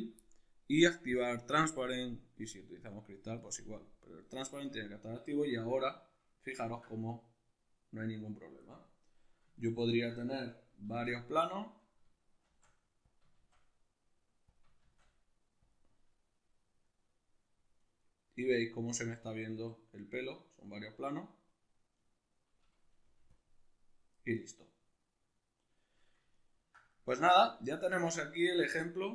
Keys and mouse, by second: 1.9 click, 4.9-12.7 middle drag, 10.5 alt+q, 12.0 shift+d, 12.7 click, 12.9 shift+d, 14.1 click, 14.4 shift+d, 15.3 click, 15.5-23.0 middle drag, 22.7 g, 23.0 click, 24.1-29.1 middle drag.